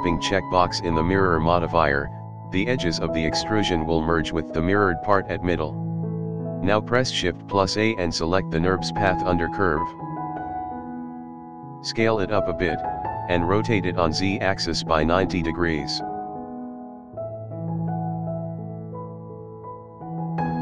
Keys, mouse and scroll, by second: 0.7-1.1 scroll down 2, 0.9-1.5 scroll up 2, 1.1-1.5 middle drag, 1.6-2.2 middle drag, 2.4-3.6 middle drag, 4.1-4.7 scroll down 4, 4.7-5.8 scroll up 2, 4.9-6.4 middle drag, 6.5 shift+a, 7.1-7.4 drag, 7.9 click, 8.6 shift+a, 11.0-11.3 scroll up 1, 11.3 scroll down 1, 11.5 s, 13.3 shift+middle drag, 13.7-14.6 middle drag, 15.0 KP_7, 15.4-16.1 scroll down 2, 16.1 r, 19.8-20.3 scroll up 1, 20.3-20.6 middle drag.